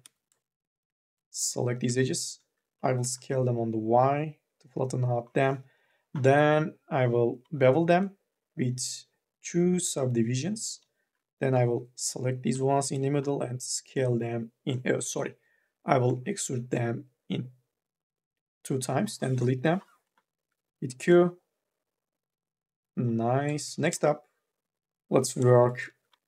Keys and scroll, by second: 2.6 t, 5.5 m, 5.9 s, 10.6 3, 11.3 u, 11.7 l, 12.7 d, 15.2 ctrl+z, 19.4 Delete, 20.4 q, 25.7 q, 26.1 3.